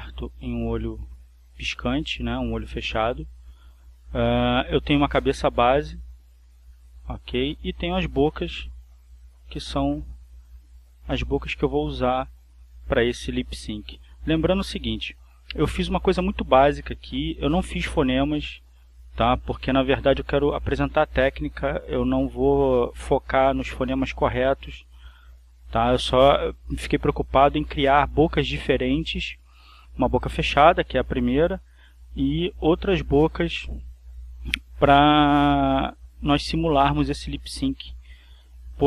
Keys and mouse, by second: 0.5 click, 3.8 click, 4.5 click, 5.5-7.3 drag, 7.5 click, 8.3 click, 9.6-11.1 drag, 11.5 click, 12.5 click, 13.2-14.3 drag, 14.7 click, 17.6 click, 18.9 click, 20.8 click, 21.4-23.9 drag, 24.3 click, 25.5-26.5 drag, 33.0 click, 34.3 click, 35.9 click, 38.5 click.